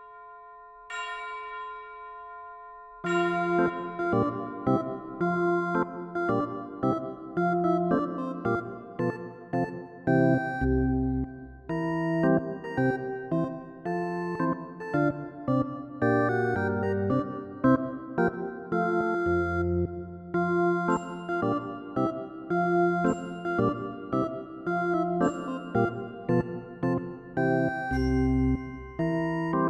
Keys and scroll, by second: 24.0 ctrl+=.